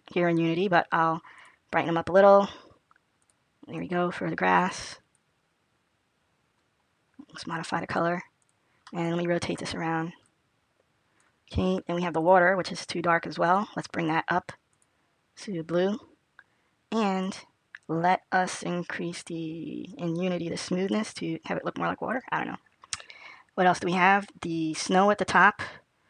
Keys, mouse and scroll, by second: 5.6 click, 10.1 click, 14.9 click, 22.1 click, 25.1 click.